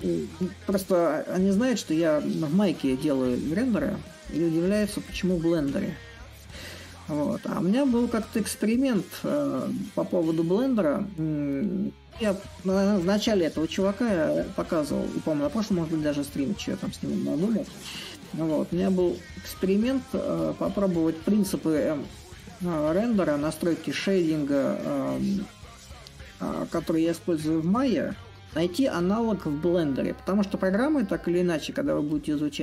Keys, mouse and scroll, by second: 0.1-5.0 drag, 5.2 click, 8.4 click, 15.7-20.7 drag, 22.1-25.8 drag, 27.6-32.6 drag.